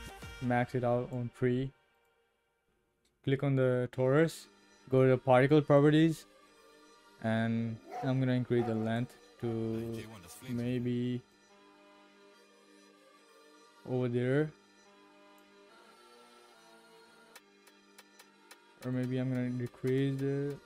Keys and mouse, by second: 0.4 click, 9.0-10.4 drag, 10.7 middle click, 11.2 click, 12.2-15.4 drag, 15.8-17.0 middle drag, 18.9-20.6 drag.